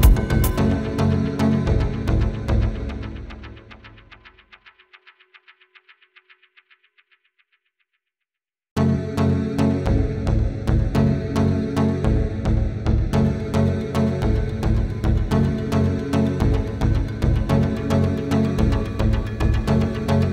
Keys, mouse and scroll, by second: 1.7 typing, 4.0 double click, 4.2 right click, 6.7 scroll up 1, 6.9 double click, 7.9-8.4 typing, 8.0-8.4 scroll up 1, 10.6 double click, 12.3 double click, 14.3 typing, 15.0 scroll down 1, 15.9 scroll up 1, 16.9 scroll down 1, 18.2 typing.